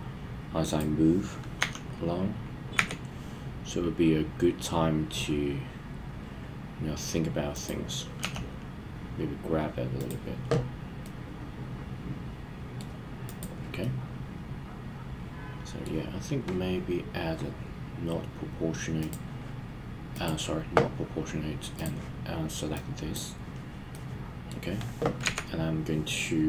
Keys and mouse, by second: 0.6 click, 1.6 s, 2.7 x, 7.5 click, 8.2 g, 10.0 drag, 11.0-12.8 middle drag, 13.3 click, 13.9-15.9 middle drag, 19.0 click, 20.1 click, 21.7 click, 22.9 click, 24.0-24.5 middle drag, 25.2 KP_1.